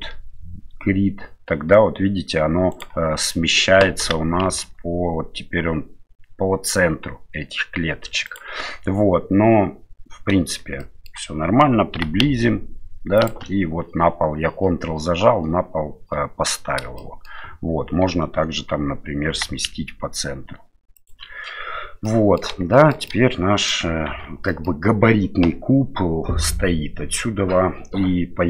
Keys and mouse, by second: 4.0 g, 10.8-11.1 shift+middle drag, 11.9 g, 17.0-17.3 shift+middle drag, 19.3 g, 22.0-22.4 middle drag, 22.7 shift+middle drag, 23.1-23.7 middle drag, 24.1 shift+z, 24.5 middle drag.